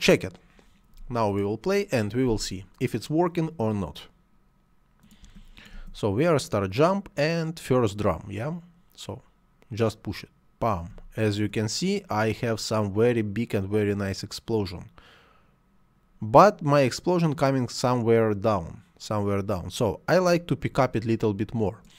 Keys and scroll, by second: 5.1 space, 10.8 space, 20.6 Escape.